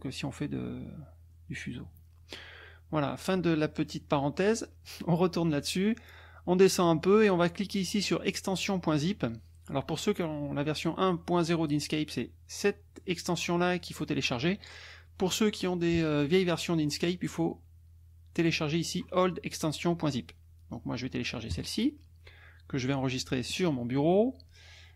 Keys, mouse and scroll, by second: 0.7 scroll down 1, 1.3-1.6 scroll down 2, 4.5 click, 6.1 scroll down 1, 14.1 scroll down 2, 14.6 scroll down 2, 21.5 click, 23.4 click.